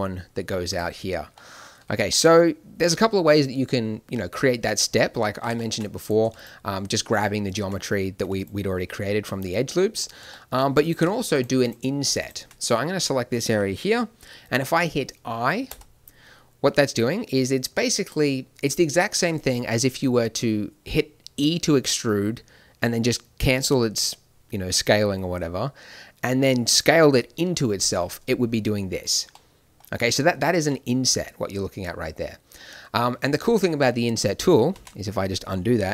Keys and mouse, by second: 1.3 middle click, 5.5 middle click, 5.9-8.3 right drag, 9.9 right click, 10.7-15.6 drag, 15.6 i, 32.5 middle click, 34.6 ctrl+z.